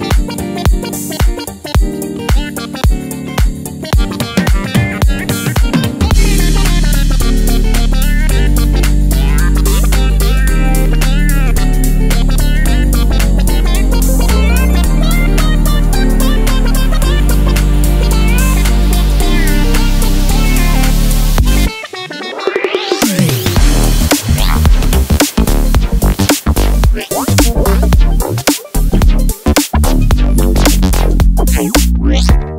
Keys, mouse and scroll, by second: 1.0 click, 3.7 click, 4.4 click, 5.3 click, 14.4 e, 20.3 click, 21.0-22.1 middle drag, 23.8 click, 24.5 middle click, 25.9 middle click, 27.6 f, 30.2 click, 31.0-32.5 drag.